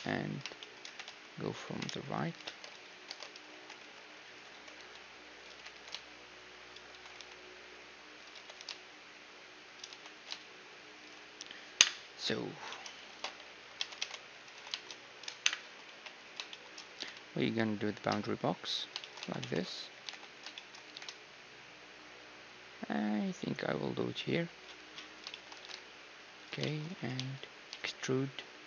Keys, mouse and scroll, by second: 0.6-2.4 middle drag, 1.2 g, 2.4 ctrl+space, 3.0 ctrl+space, 3.5 g, 4.5 s, 5.5 g, 6.9 s, 8.3 g, 9.9 s, 11.8 KP_1, 12.5-15.1 middle drag, 13.0 ctrl+space, 13.8 Tab, 15.4 KP_1, 15.6 a, 15.8 b, 16.9 g, 18.6 middle click, 19.0-22.5 middle drag, 19.3 a, 19.4 b, 19.9 g, 20.8 g, 25.0-28.5 middle drag, 25.5 g, 27.0 e.